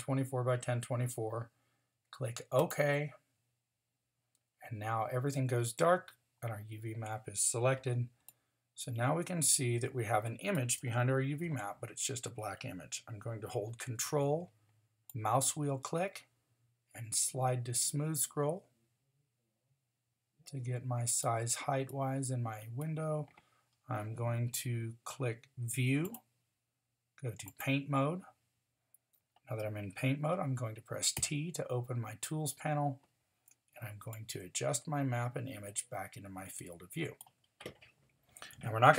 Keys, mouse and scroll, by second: 31.2 t.